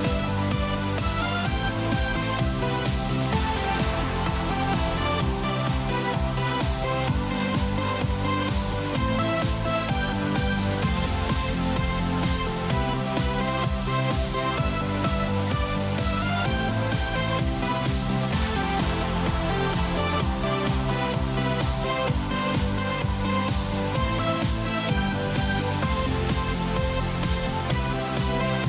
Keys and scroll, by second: 5.7 ctrl+z, 6.5 ctrl+z.